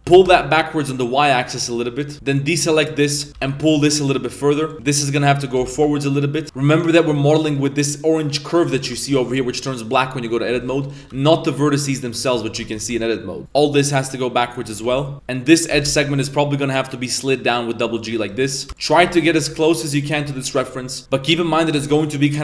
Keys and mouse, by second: 3.3 g, 3.3 g, 4.7 a, 4.7 b, 5.6 g, 6.4 Tab, 6.7 right click, 7.1 Tab, 8.7 Tab, 9.2 shift+middle drag, 9.4 a, 10.8 right click, 11.1 g, 12.5 a, 12.8 shift+middle click, 13.4 b, 13.5 g, 14.7 a, 14.9 b, 15.7 g, 18.2 right click, 18.7-19.4 typing, 20.3 Tab, 21.0 KP_3, 21.8 KP_7.